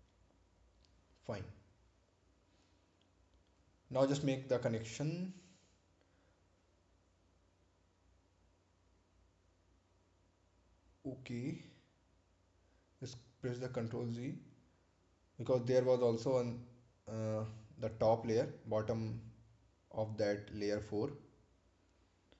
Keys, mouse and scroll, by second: 0.6 click, 12.8 ctrl+z, 13.9 ctrl+z, 15.8 click.